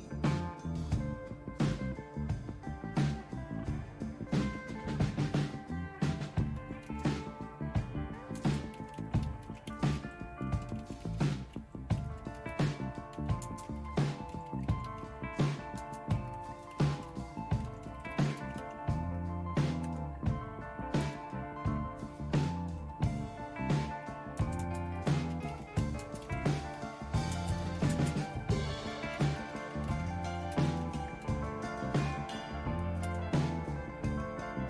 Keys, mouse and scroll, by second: 8.4-22.5 typing, 24.4-31.7 typing, 32.8-33.5 typing.